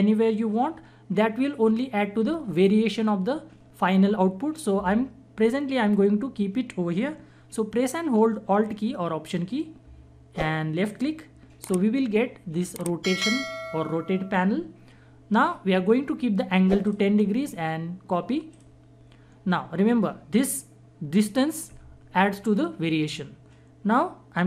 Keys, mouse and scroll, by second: 9.9 alt+Num_Lock, 10.9 alt+click, 16.8 click.